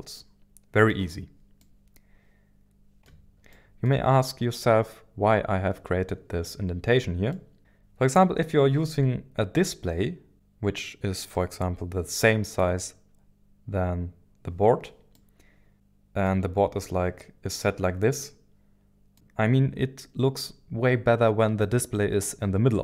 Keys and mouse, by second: 0.1-0.9 middle drag, 1.6-3.0 middle drag, 3.5 middle click, 4.5 middle click, 7.3-7.6 middle drag, 15.1-16.3 middle drag, 18.2 middle click.